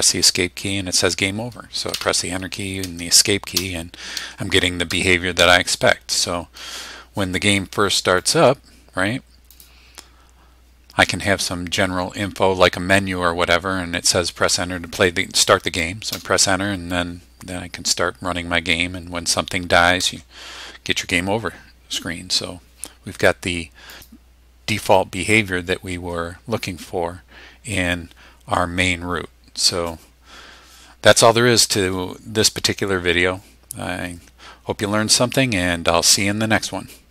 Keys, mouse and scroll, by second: 2.0 \, 2.8 Escape, 3.6 Return, 4.3 Escape, 5.0 Return, 5.5 Escape, 8.2 click, 9.5 click, 16.2 Return, 20.0 Escape, 23.9-37.1 drag.